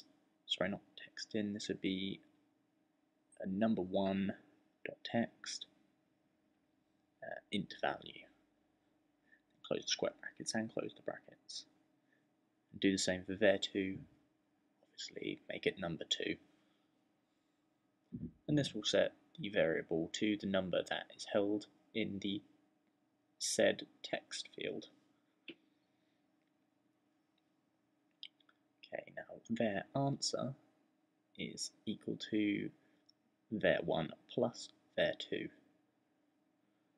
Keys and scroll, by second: 0.0-1.4 typing, 2.8-7.2 typing, 9.3-11.0 typing, 12.3-24.2 typing, 28.5-30.4 typing, 33.1-36.0 typing.